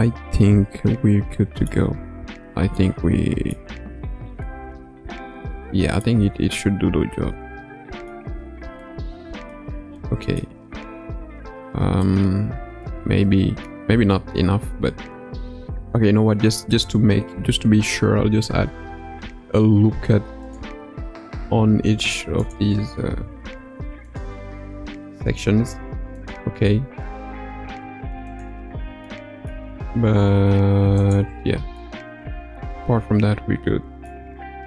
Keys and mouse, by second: 2.7 middle click, 4.4-6.0 middle drag, 6.5-8.1 middle drag, 8.7 middle click, 9.9 middle click, 12.0-13.6 middle drag, 18.7 ctrl+r, 23.5 ctrl+r, 25.5 ctrl+r, 27.7 ctrl+r, 29.2 middle click, 30.0 ctrl+r, 31.8-34.1 middle drag, 34.2 Tab.